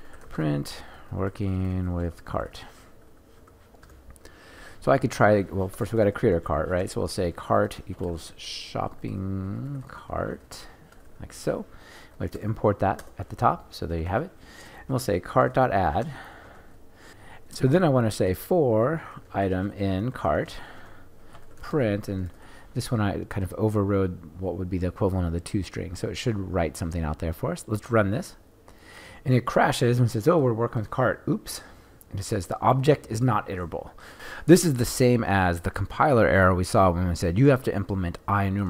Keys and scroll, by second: 12.3 alt+Return, 16.4 Return, 28.2 shift+F10.